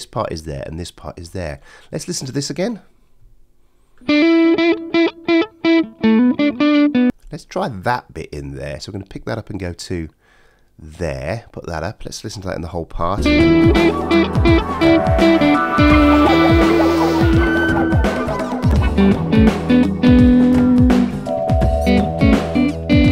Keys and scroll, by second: 13.1 space.